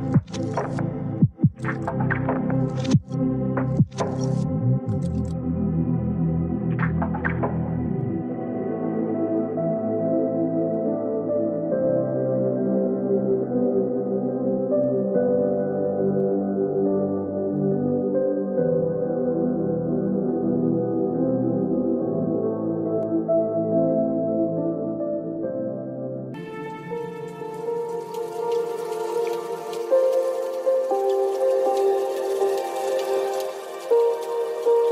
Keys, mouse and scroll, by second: 2.1 ctrl+r, 6.8 ctrl+r, 6.9 ctrl+r, 7.0 ctrl+r, 7.9 click, 11.6 g, 12.3 click, 15.6 ctrl+r, 21.7 click, 22.0 click, 24.4 click, 25.4 click, 26.9 g, 28.0 click, 29.0 click, 29.9 g, 33.4 click, 33.8 click.